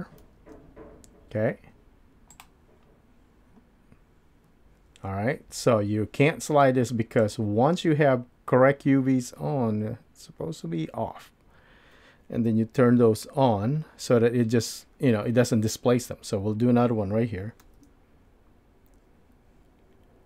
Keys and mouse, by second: 0.2 ctrl+r, 17.6 ctrl+r.